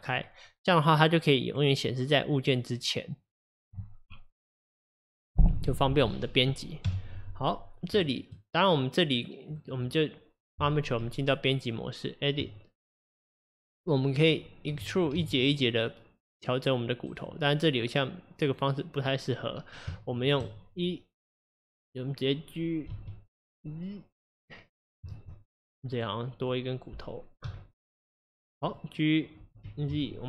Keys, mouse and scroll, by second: 0.5-3.6 middle drag, 6.9 KP_1, 7.5-8.0 scroll up 2, 8.0 shift+middle drag, 8.3-8.9 scroll up 1, 8.9 click, 9.6 click, 11.0 Tab, 13.2 click, 14.7 e, 18.5 click, 20.0-22.9 shift+middle drag, 22.9 g, 25.1 ctrl+z, 25.9 click, 26.4 click, 27.5 x, 28.7 click, 29.5 g.